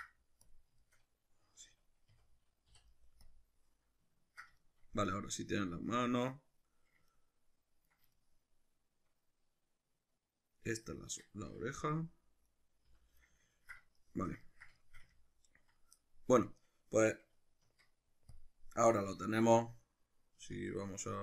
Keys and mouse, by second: 0.8 shift+middle click, 2.2 a, 2.7 u, 4.6-10.9 shift+middle drag, 10.9 right click, 11.8 l, 12.5 right click, 12.9 l, 13.6-21.2 ctrl+middle drag, 17.7 Tab.